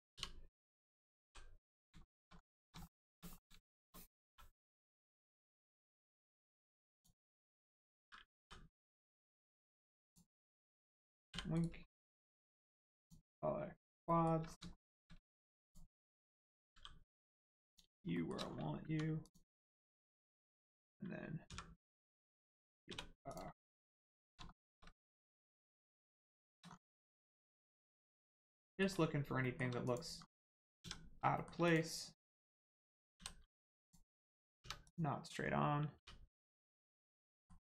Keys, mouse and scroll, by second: 0.1 u, 1.8 click, 2.0 shift+middle click, 2.3 scroll up 1, 2.8 shift+middle click, 4.2 middle click, 6.9 click, 8.4 k, 9.2 right click, 10.0 click, 11.2 l, 11.5 right click, 13.0 click, 14.0 shift+middle click, 14.4 scroll up 1, 14.7 shift+middle click, 15.6 click, 16.3 middle click, 16.7 g, 17.6 click, 18.0-18.4 shift+scroll up 2, 18.1 shift+middle click, 18.8 2, 19.2 click, 19.8 shift+click, 21.4 v, 22.8 Return, 23.2 click, 23.5 scroll down 1, 24.4 shift+middle click, 25.2 scroll down 1, 26.3 shift+middle click, 26.6-27.3 scroll up 1, 27.3 click, 27.6 shift+middle click, 29.8 click, 30.1 scroll down 1, 30.8 a, 31.3 shift+middle click, 31.6 click, 33.1 l, 33.8 click, 34.6 3, 34.8 click, 35.4 scroll down 1, 35.9 u, 36.5 shift+middle click.